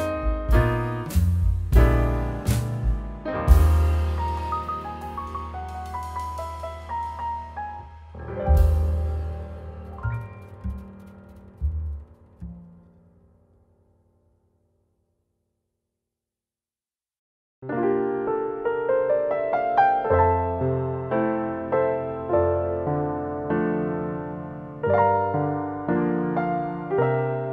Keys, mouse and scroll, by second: 0.6 click, 0.9 scroll down 5, 1.2 scroll up 3, 1.5 shift+middle click, 2.2-2.7 scroll down 2, 2.7 middle click, 3.3 scroll up 8, 3.6 middle click, 4.2 shift+middle click, 5.5 click, 7.5 click, 7.8 middle click, 8.9-9.3 scroll up 2, 9.4 shift+middle click, 9.8 scroll up 1, 10.7-12.3 scroll down 3, 14.7 click, 15.6 shift+a, 16.2 click, 16.6 shift+d, 17.5 click, 18.6 scroll down 1, 19.0 scroll up 2, 19.3 middle click, 21.0-22.0 scroll up 1, 22.1 click, 22.5 click, 23.1 click, 23.8 click, 24.2 middle click, 24.6-25.3 scroll down 3, 25.3 middle click, 26.4 shift+middle click, 27.0 scroll up 1.